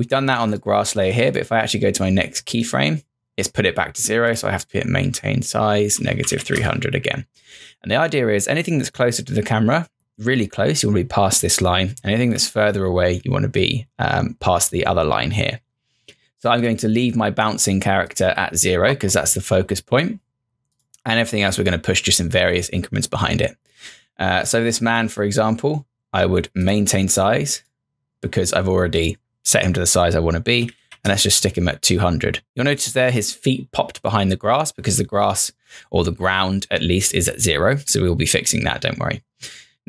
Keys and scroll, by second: 30.3-31.3 typing.